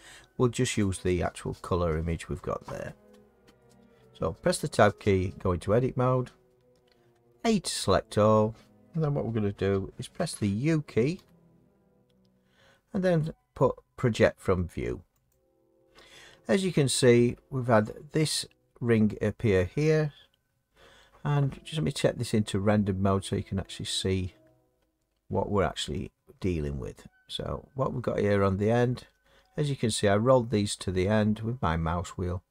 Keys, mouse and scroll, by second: 5.3 Tab, 7.3 a, 11.1 u, 15.9 click, 22.4-28.5 scroll, 29.4-32.5 scroll.